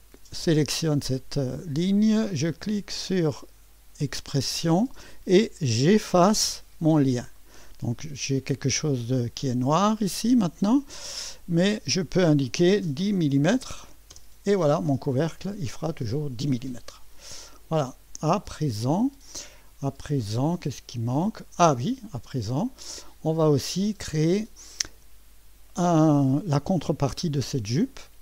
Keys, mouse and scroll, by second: 0.0 click, 3.7 click, 5.7 click, 7.4 click, 9.8 click, 11.5 click, 12.9 1, 13.2 0, 14.1 Return, 15.1-18.1 drag, 18.9-22.1 drag, 22.7-23.8 drag, 25.0 click, 26.8-27.5 scroll up 1.